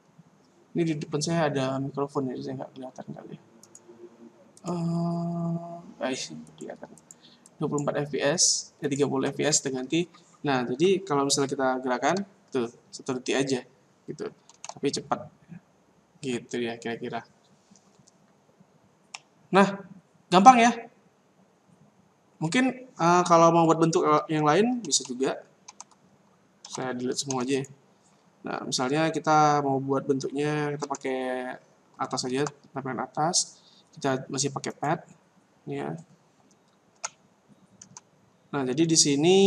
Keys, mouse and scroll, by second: 2.4 scroll down 3, 2.6-3.6 scroll up 1, 3.6 click, 3.7 click, 4.5 click, 4.6 click, 6.4 click, 6.9 click, 7.5 click, 11.9 alt+a, 13.4 Escape, 14.5 alt+a, 16.2 Escape, 19.1 middle click, 22.5-23.0 scroll down 1, 24.7-27.2 typing, 28.1 scroll up 4, 28.5-29.7 scroll down 11, 30.8 KP_7, 32.1 shift+a, 34.8 click, 36.9 g.